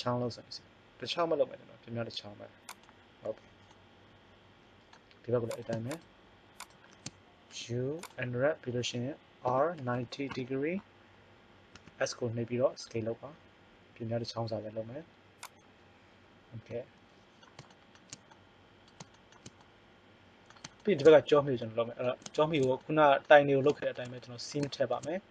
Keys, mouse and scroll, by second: 3.6 middle click, 5.6 right click, 7.4 u, 9.4 r, 11.7 s, 16.8-20.5 middle drag, 22.6 middle click.